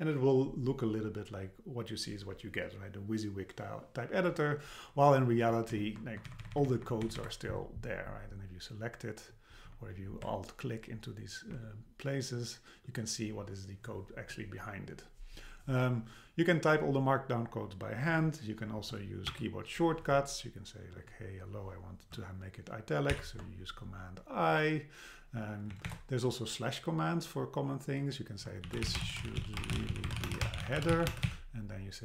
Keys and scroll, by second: 5.4 Left, 23.1 super+i, 25.7 Return.